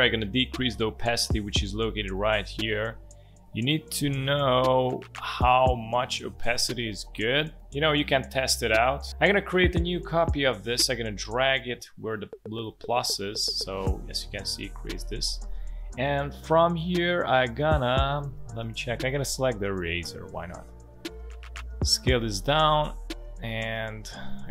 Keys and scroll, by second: 19.9 e, 20.5 space, 22.0 alt+space.